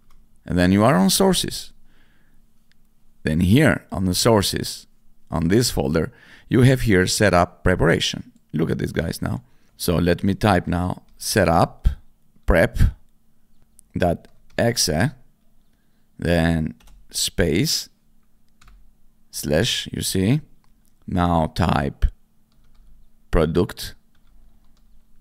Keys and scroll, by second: 0.0-0.1 typing, 10.8-15.0 typing, 16.8 space, 22.4-25.2 typing.